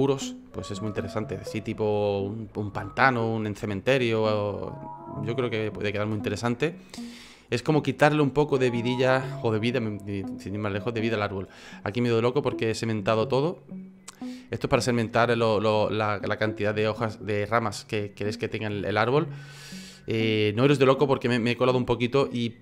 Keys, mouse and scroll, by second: 15.1 click.